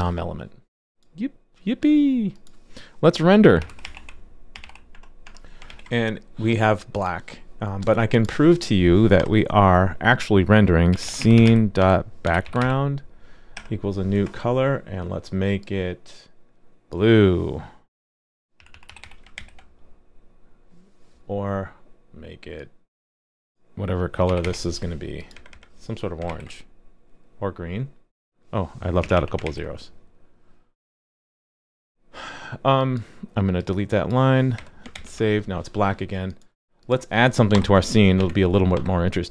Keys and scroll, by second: 5.7 super+s, 19.4 super+s, 26.3 super+s, 29.4 super+s, 34.9 super+s.